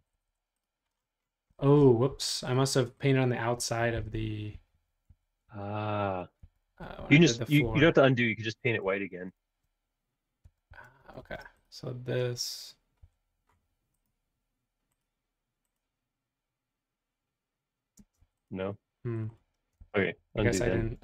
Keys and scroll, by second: 0.1 Home, 0.2 Home, 4.0 super+z, 4.5 super+z, 4.8 super+z, 5.1 super+z, 5.5 super+z, 6.0 super+z, 7.0 super+z, 8.8 shift+super+z, 9.0 shift+super+z, 9.1 shift+super+z, 9.5 shift+super+z, 11.0 shift+super+z, 11.6 shift+super+z, 13.0 b, 17.9 space, 19.8 super+z, 20.0 super+z, 20.3 super+z, 20.4 super+z, 20.7 super+z.